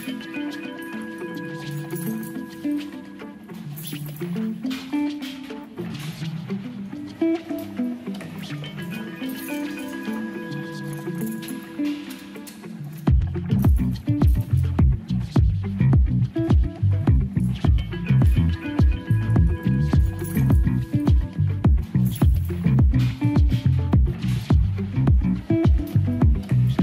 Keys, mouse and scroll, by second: 0.2 shift+middle click, 1.0 shift+a, 3.3-5.0 drag, 6.4-7.2 drag, 10.5 Tab, 11.6 s, 12.5 click, 16.3 shift+middle click, 17.1 shift+middle click, 20.2 shift+middle click, 20.8 q, 23.9 shift+middle click, 26.3 w.